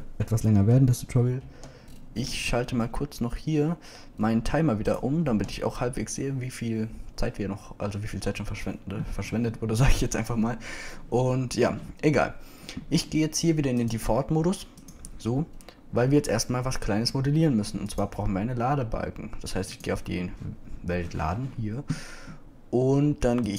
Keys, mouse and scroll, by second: 2.5 n, 5.6-7.8 drag, 6.3 n, 15.1 click, 16.5-17.3 typing.